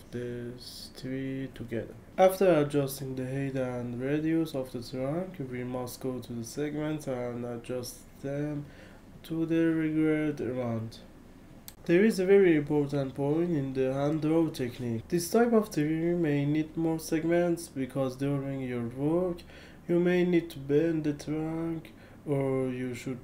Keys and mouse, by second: 1.5 ctrl+z, 4.3 KP_2, 4.4 Return, 7.6 KP_2, 7.7 Return, 9.4 ctrl+z, 10.0 ctrl+z, 11.3 ctrl+z, 12.7 KP_8, 12.8 Return, 13.1 KP_1, 13.2 KP_5, 13.3 Return, 14.4 middle click, 16.0 KP_2, 16.2 Return, 18.6 KP_2, 22.0-23.2 typing, 22.1 Return, 22.6 Return.